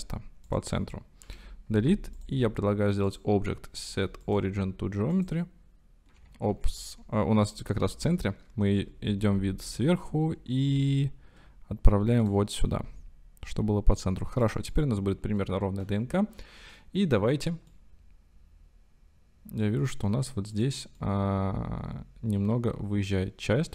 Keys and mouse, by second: 0.5 click, 3.1 Delete, 3.2-5.3 drag, 6.5 ctrl+z, 8.8 KP_7, 9.7 g, 9.9 x, 10.7 y, 12.3 drag, 14.8-15.5 middle drag, 16.4 middle click, 17.8-20.1 middle drag, 20.6 middle click, 21.0-23.7 drag.